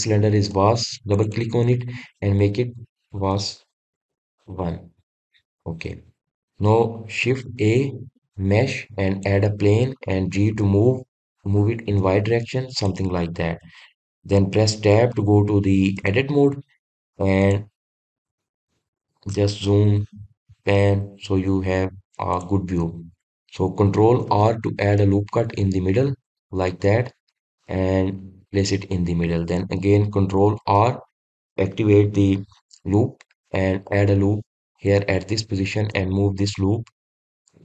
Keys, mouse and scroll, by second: 1.3 click, 1.9 click, 2.1-5.2 drag, 6.2 click, 6.7-7.6 scroll up 1, 7.6 click, 8.2 shift+a, 14.1-14.7 scroll up 2, 14.7-16.7 middle drag, 16.7 Tab, 17.2-17.7 scroll down 1, 17.7-18.2 scroll up 1, 18.2 click, 18.7-19.1 scroll down 1, 19.1 middle click, 19.7-20.3 scroll up 4, 20.3 shift+middle click, 20.9-21.4 scroll up 3, 21.4 shift+middle click, 21.9-22.4 scroll up 1, 22.4 scroll down 1, 22.5-23.1 scroll up 2, 23.1 click, 25.0 ctrl+r, 28.8 click, 31.4 ctrl+r.